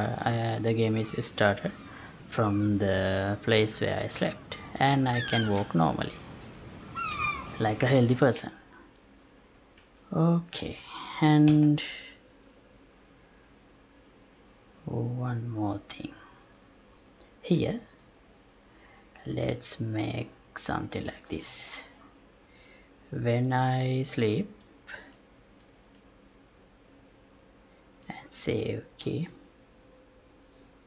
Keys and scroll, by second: 8.2 Escape, 11.4 F11.